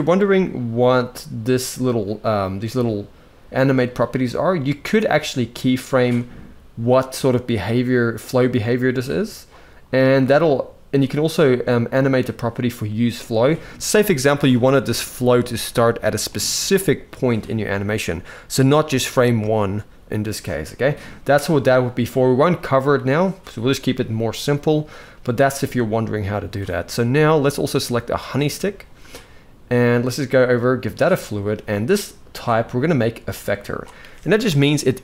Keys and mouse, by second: 15.8 click, 32.0-33.2 drag.